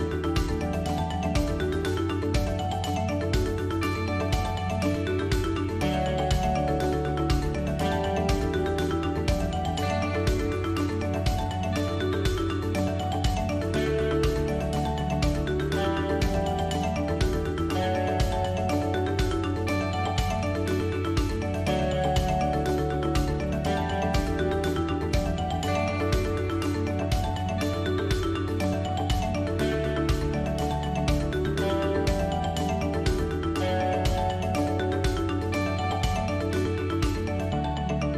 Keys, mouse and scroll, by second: 3.1 KP_7, 4.8 KP_1, 23.3-24.0 drag, 29.8-34.1 drag.